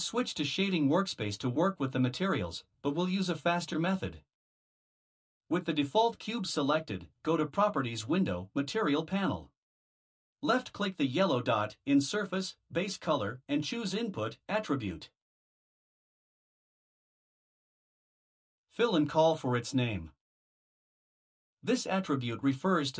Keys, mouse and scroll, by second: 4.0 click, 11.2 click, 18.8 click.